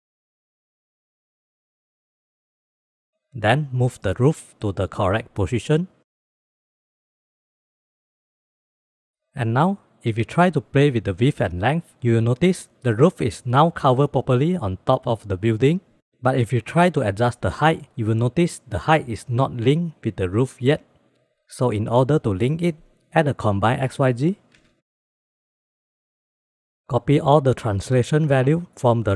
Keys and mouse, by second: 0.0-0.6 drag, 1.6-2.2 drag, 4.3-5.3 drag, 5.8-6.9 drag, 7.0 alt+z, 7.2-8.3 drag, 8.7-9.4 middle drag, 9.7 shift+middle click, 10.5 click, 10.8 click, 11.2 click, 12.1 click, 12.6 click, 12.9 click, 13.9 click, 14.1-14.8 drag, 14.8 click, 15.5 ctrl+s, 17.3 click, 18.7 click, 19.1 click, 19.3 click, 19.7 click, 21.1 click, 21.9 shift+a, 23.9 drag, 24.3 click, 25.2 click, 26.4 middle click, 27.2-29.1 drag.